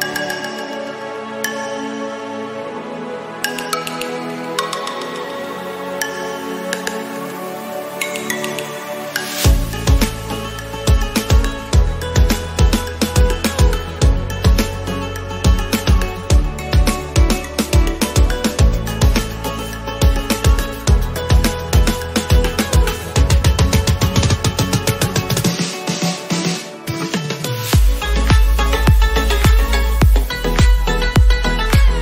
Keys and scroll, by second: 5.6 ctrl+z, 12.2 ctrl+z.